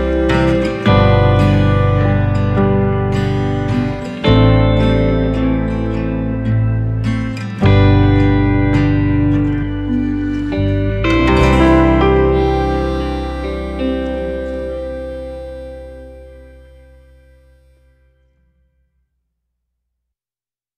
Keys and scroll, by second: 17.3 v.